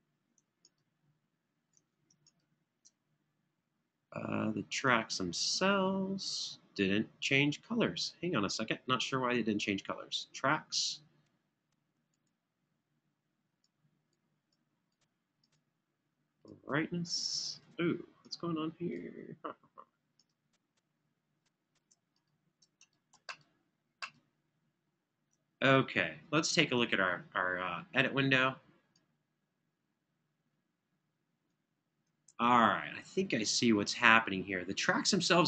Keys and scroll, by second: 26.8 super+=, 32.0 super+=.